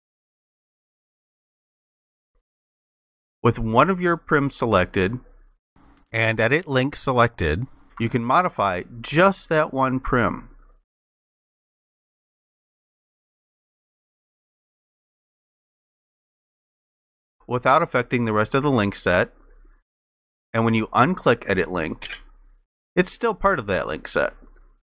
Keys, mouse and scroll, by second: 9.0 ctrl+shift+click, 11.2 ctrl+shift+click, 14.5 ctrl+shift+click.